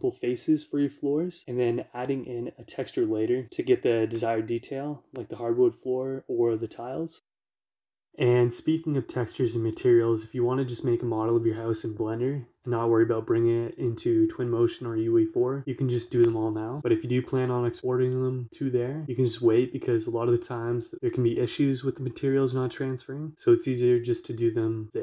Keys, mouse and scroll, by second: 1.0 scroll down 1, 1.2 middle click, 1.8-2.3 scroll down 2, 1.9 middle click, 2.3 middle click, 2.7 scroll down 1, 3.0 middle click, 3.1 7, 8.0-13.0 shift+middle drag, 15.4-16.4 shift+drag, 17.5 Escape, 17.7-25.0 shift+middle drag.